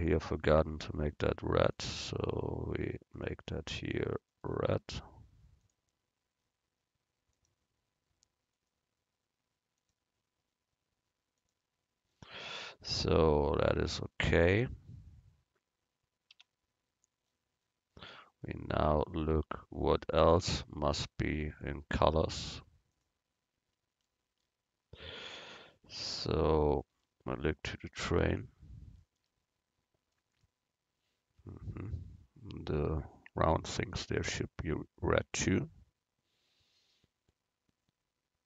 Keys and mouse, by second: 0.2-1.7 right drag, 1.8-3.8 drag, 1.8-3.6 right drag, 5.7-7.5 drag, 5.7-7.5 right drag, 9.9-11.6 drag, 9.9-11.6 right drag, 16.4 Tab, 21.4-23.1 drag.